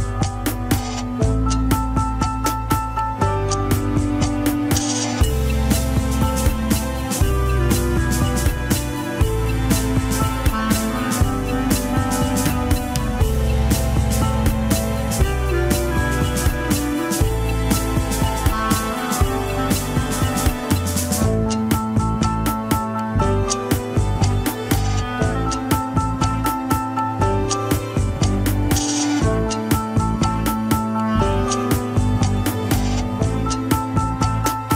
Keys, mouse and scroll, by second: 3.3 Tab, 3.8 click, 4.1 Tab, 4.3 KP_3, 4.7 alt+z, 5.4 click, 7.4 ctrl+l, 8.2 click, 8.9 click, 9.7 click, 10.2 shift+s, 10.6 KP_1, 11.1 Tab, 11.2 alt+z, 11.3 click, 11.7 Tab, 12.0 r, 14.1 scroll down 3, 14.9 ctrl+Tab, 15.7 ctrl+s, 17.0 click, 18.3 scroll down 2, 18.5-19.4 middle drag, 19.5-20.5 middle drag, 22.5 scroll up 1, 22.7 scroll down 5, 22.8 alt+z, 23.2 scroll up 1, 23.7 Tab, 24.1 alt+h, 24.3 click, 24.7-26.8 middle drag, 27.9 click, 28.2 KP_3, 28.5-29.3 scroll up 1, 29.3 scroll down 2, 29.6 alt+z, 30.0-31.6 middle drag, 31.6 KP_1, 31.7-32.1 scroll down 3, 32.6 ctrl+Tab, 33.3 ctrl+s, 33.4 shift+middle click, 34.4-34.7 scroll down 3.